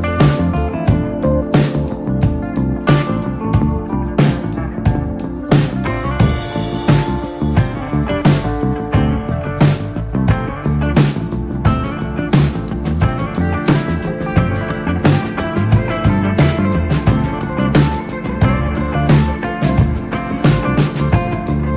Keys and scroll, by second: 1.9 ctrl+space, 4.1 ctrl+space, 5.4 r, 6.4 ctrl+z, 7.2 space, 7.4 r, 7.5 space, 9.8 space, 12.0 space, 12.7 r, 13.1 b, 16.1 r, 16.9 x, 17.5 e, 19.2 b, 19.6 x, 21.3 r, 21.6 b.